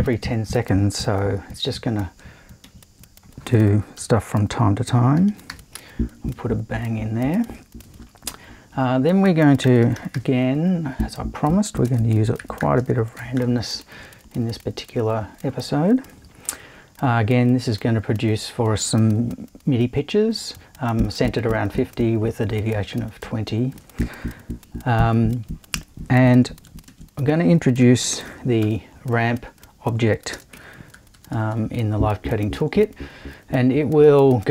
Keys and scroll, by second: 2.6 super+i, 4.0-6.0 typing, 8.7 super+i, 9.6-10.6 typing, 11.8-13.8 typing, 26.9 super+i, 27.8 super+r, 28.3 m, 28.6 p, 30.3 space, 30.5 i, 30.9 0.